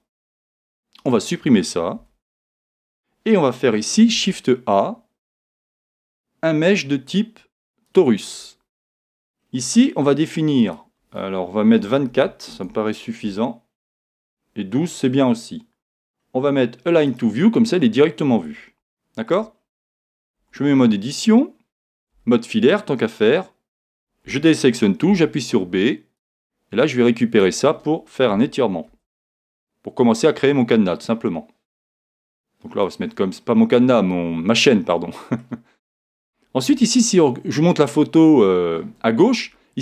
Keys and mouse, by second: 1.0 right click, 2.0 x, 4.1 shift+a, 5.5 shift+a, 9.4-10.6 middle drag, 10.6 click, 15.3-17.1 middle drag, 17.1 click, 18.9-20.4 middle drag, 20.4 Tab, 22.1 z, 24.2 a, 25.1 b, 28.3 g, 32.9 click, 34.8 middle click, 36.7 a.